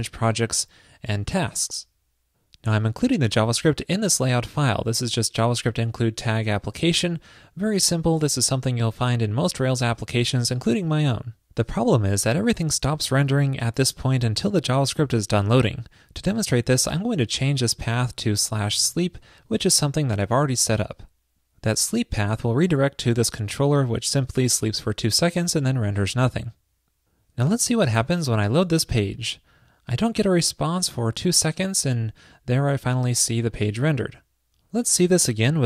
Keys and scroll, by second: 20.4 super+s.